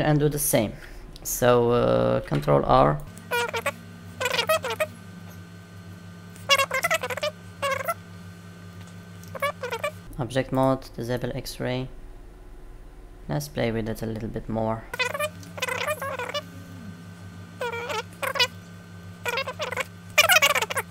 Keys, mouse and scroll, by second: 2.1 ctrl+r, 10.0 Tab, 10.5 click, 11.1 middle click, 13.2 Tab.